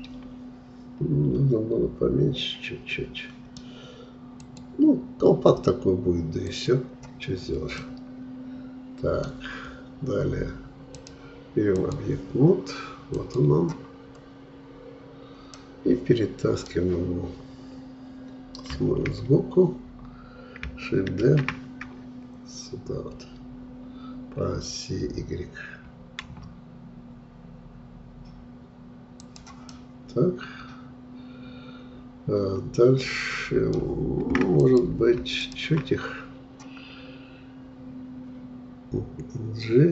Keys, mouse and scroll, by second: 7.3-7.8 scroll down 2, 7.8-10.8 middle drag, 11.0-14.1 drag, 14.1-14.7 scroll up 2, 15.6-18.7 middle drag, 18.7 KP_3, 21.2 shift+d, 29.7-32.7 middle drag, 34.6-38.4 drag.